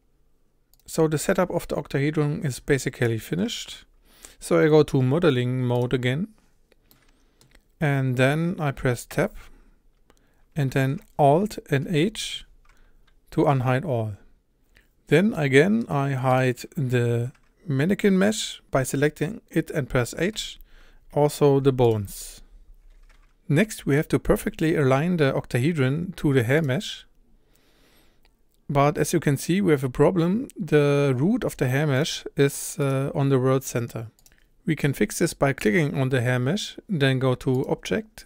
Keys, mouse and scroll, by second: 0.8 click, 5.8-6.9 drag, 6.9 middle click, 7.8-9.1 scroll up 1, 9.1 Tab, 11.9 alt+h, 13.3-14.2 scroll up 1, 14.7-15.3 scroll up 1, 15.3-16.4 middle drag, 16.4 click, 20.4 h, 21.4 click, 21.7 h, 21.9 click, 22.0 h, 23.1 click, 26.6 click, 32.0 click, 32.9 click, 34.1 click, 34.2 click, 35.7 click.